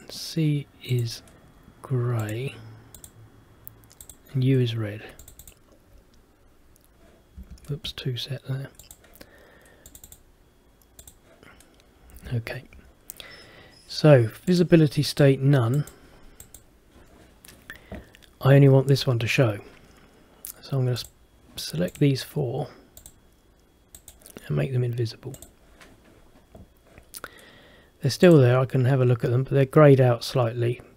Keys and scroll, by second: 7.5 Escape, 12.3 Escape.